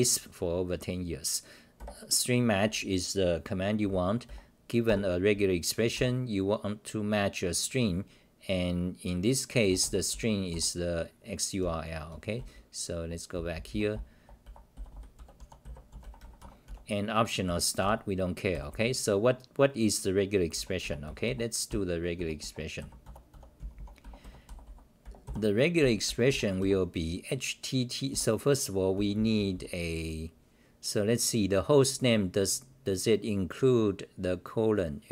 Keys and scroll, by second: 1.7 1, 2.3 scroll down 2, 4.2-4.9 scroll down 1, 4.2 r, 4.9 ctrl+g, 5.9 r, 10.1 t, 10.5 g, 11.6-17.4 typing, 16.4 Home, 18.5 g, 20.3-26.8 typing, 28.1 g, 28.9 n.